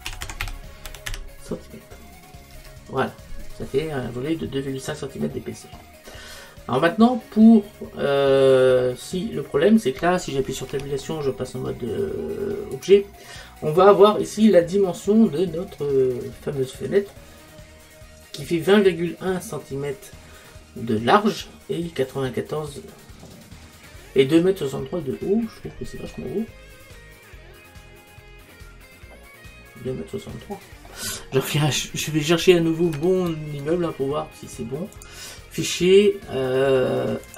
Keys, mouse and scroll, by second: 5.3-10.7 middle drag, 10.7 Tab, 14.8-28.2 middle drag, 25.0-27.8 scroll down 1, 35.0 click.